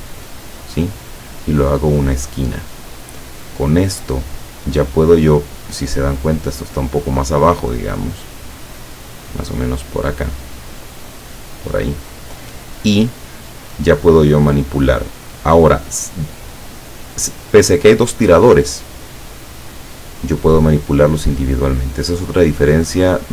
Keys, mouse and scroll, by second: 1.1 click, 8.3-12.2 drag.